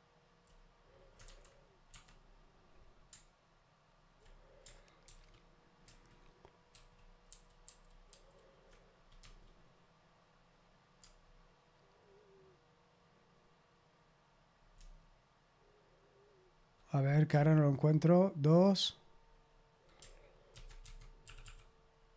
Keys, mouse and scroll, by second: 0.0-0.4 typing, 1.9 Escape, 5.0 ctrl+d, 5.8 ctrl+d, 6.7 ctrl+d, 7.2 ctrl+d, 10.9 3, 14.7 5, 17.2 2, 20.5 ctrl+f, 20.5-21.9 typing.